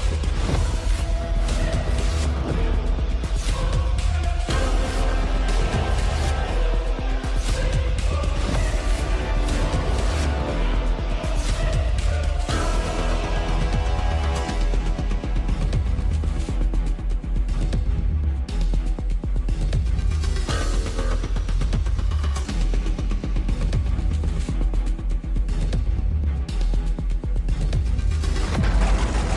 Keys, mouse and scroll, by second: 7.5 right click, 14.2 right click.